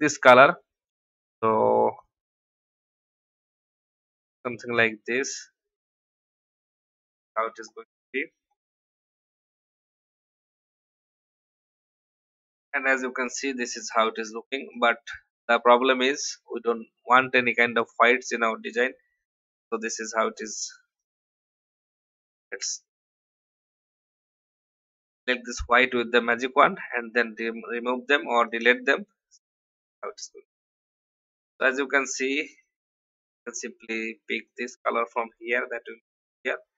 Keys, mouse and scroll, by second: 5.8 v, 6.2 click, 8.6 m, 9.6 click, 13.0 click, 14.7 click, 23.0 alt+scroll up 1, 23.7 alt+y, 24.4 click, 26.3 Delete, 27.3 alt+scroll down 1, 28.0 v, 28.4 click, 29.3-29.7 alt+scroll down 1, 30.4 click, 31.0-32.0 alt+scroll down 1, 32.0 click, 33.2 i, 34.4 click, 35.5 v, 35.8-36.7 drag.